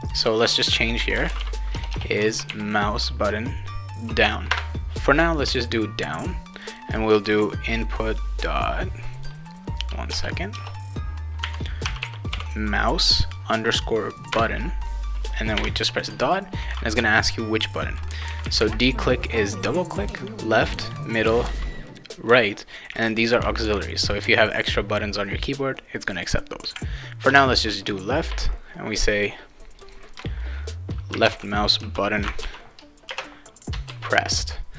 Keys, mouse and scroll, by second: 0.0 click, 0.9-2.5 typing, 4.5 shift+Return, 6.5 click, 6.7 click, 7.7 click, 8.6 click, 10.1-12.8 typing, 14.3 Return, 15.6 ., 27.3 Return, 29.2 click, 30.9-31.8 typing, 32.4 ctrl+s, 33.1 space, 33.9 ctrl+s.